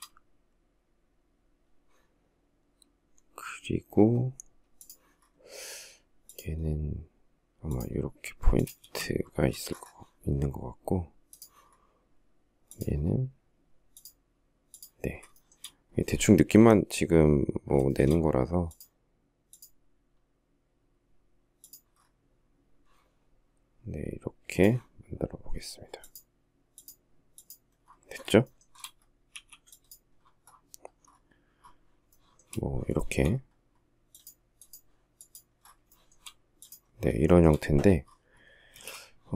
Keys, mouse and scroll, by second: 8.0 space, 14.6 shift+middle click, 17.1 shift+middle click, 27.7 shift+middle click, 28.0 shift+scroll up 1, 28.5 e, 31.3 shift+middle click, 32.2 shift+middle click, 32.4 shift+middle click, 35.1 shift+middle click, 35.3 shift+scroll, 36.5 shift+middle click, 38.0 space, 38.8 shift+middle click.